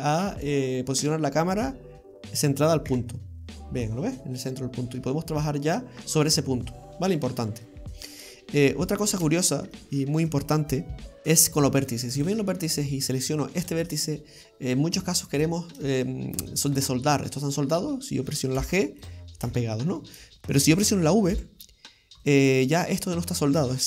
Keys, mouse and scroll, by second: 2.9 KP_Decimal, 4.7-5.0 scroll down 3, 5.1 middle click, 7.9-8.5 scroll down 2, 8.3 middle click, 9.3 shift+middle click, 9.8-10.6 scroll down 2, 12.2 click, 13.6 right click, 14.2 middle click, 15.3 shift+right click, 15.8 shift+middle click, 16.9 middle click, 18.6 g, 19.5 ctrl+z, 20.4 middle click, 21.3 v, 22.8 middle click.